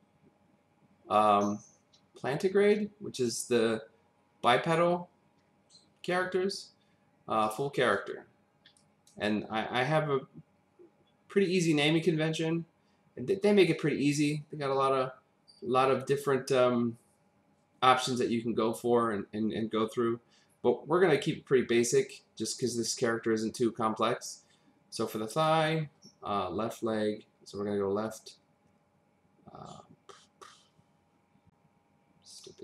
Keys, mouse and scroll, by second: 7.4 click, 8.8 click, 22.5 click, 25.4 click, 32.3 click.